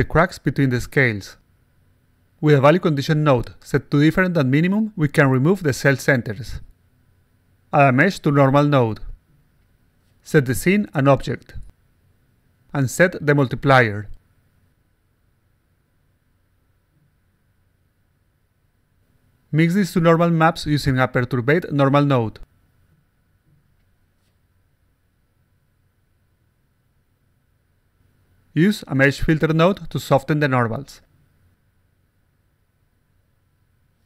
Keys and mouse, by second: 2.4 click, 3.2 click, 4.6 click, 5.3 click, 6.9 click, 8.8 click, 10.4 click, 10.9 click, 11.3 click, 11.7 click, 13.0 click, 13.6 3, 15.2-16.2 drag, 17.1-18.1 drag, 20.5 click, 21.8 click, 22.7 click, 23.9 click, 25.7 click, 27.4-28.4 drag, 29.6-30.4 drag, 30.7 click, 32.0 click, 32.3 click, 32.6 click, 33.2 click.